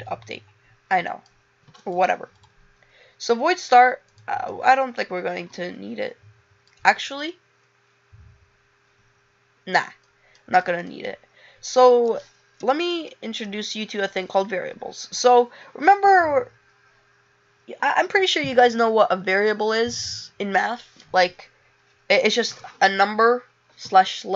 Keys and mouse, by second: 4.4 click, 7.2 click, 10.2 click, 10.8 click.